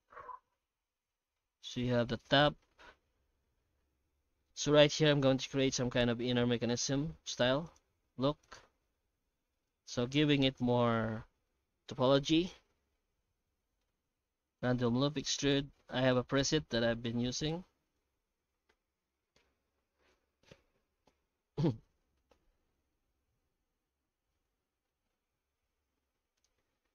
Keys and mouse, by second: 2.2 click, 2.7 Tab, 3.4 alt+a, 4.8 shift+middle click, 5.5 middle click, 6.1 ctrl+r, 7.9 3, 8.4 alt+shift+right click, 9.2 q, 10.4 Tab, 10.7-11.5 middle drag, 12.7-13.2 middle drag, 13.5 shift+q, 16.5 shift+q.